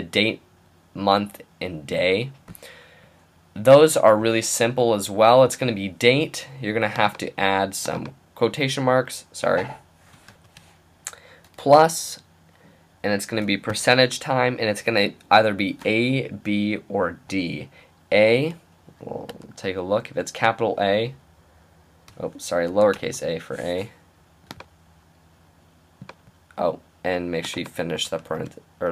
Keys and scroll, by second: 10.7 typing, 11.8 typing, 13.4-14.3 typing, 15.8 typing, 19.3 shift+a, 22.7 a, 22.9 Return, 28.2 shift+".